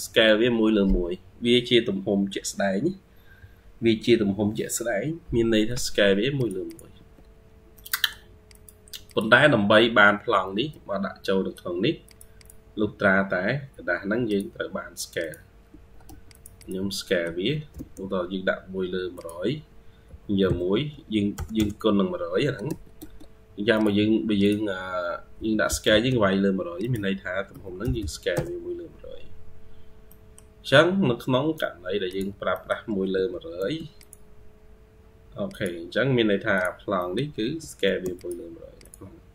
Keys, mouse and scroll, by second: 5.6 Escape, 5.9 Escape, 6.5 double click, 6.8 Escape, 6.9-7.6 scroll down 3, 7.6 middle click, 8.9 double click, 9.3-10.4 scroll down 1, 10.6 Escape, 11.0-11.5 scroll up 2, 12.3 double click, 12.9-13.9 scroll up 1, 15.5 Escape, 15.9 Escape, 16.4 double click, 16.9 middle click, 17.7-18.7 typing, 17.9 scroll up 1, 22.5 Escape, 22.8 Escape, 24.6-25.2 scroll up 2, 25.2-25.5 typing, 27.4-28.3 typing, 29.2-29.9 scroll down 12, 29.9 middle click, 30.6-31.7 scroll up 4, 32.4 middle click, 33.0 typing, 36.8 middle click, 37.3 typing, 39.2-39.3 scroll up 2.